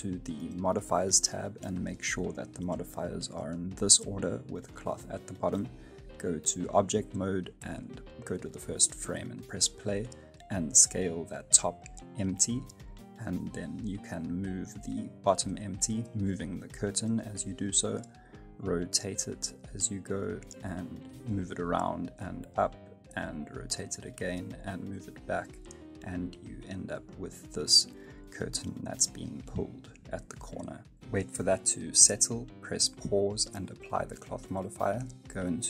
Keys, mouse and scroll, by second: 0.5 click, 1.6 click, 2.9 click, 3.6 middle click, 4.2 shift+middle click, 5.1 Tab, 5.5 middle click, 5.9-6.7 scroll down 2, 6.2 middle click, 7.2 click, 8.9 space, 9.9 right click, 10.3 s, 12.4 space, 12.5 right click, 12.7 KP_7, 12.9 space, 13.3 r, 17.4 r, 19.1 space, 19.2 middle click, 19.6 middle click, 19.8 middle click, 19.9 space, 20.2 g, 22.6 r, 23.5 middle click, 26.3 middle click, 26.9 space, 27.0 scroll up 2, 27.1 middle click, 27.5 space, 27.9 g, 29.2 space, 29.3 scroll down 2, 29.4 middle click, 30.6 space, 31.0 middle click, 31.8 g, 32.2 middle click, 32.7 space, 32.8 middle click, 32.9 scroll up 1, 33.0 middle click, 33.1 right click, 33.7 click, 33.9 middle click, 34.2 right click, 34.2 F9, 35.0 right click.